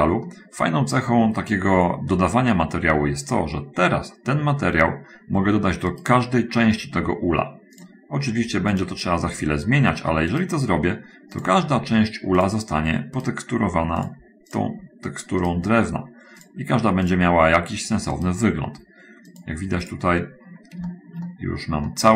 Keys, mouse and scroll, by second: 1.5 middle click, 2.2 middle click, 6.3 right click, 8.2 click, 8.9 click, 10.7 right click, 12.9 click, 13.2 right click, 14.5 click, 15.9 right click, 16.9 click, 17.5 click, 18.6 right click, 19.5 click, 20.3 click, 21.3 shift+middle click.